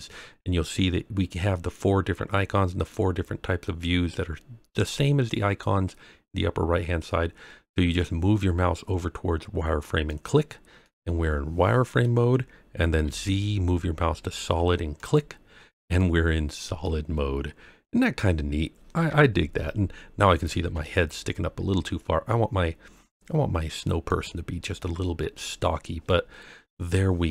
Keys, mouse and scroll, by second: 10.8-12.0 middle drag, 13.0 z, 15.9-16.8 middle drag, 17.1 scroll up 1, 19.0 KP_3, 20.6 g, 20.6 z, 24.0 click, 25.6 scroll down 2, 26.0-27.3 middle drag.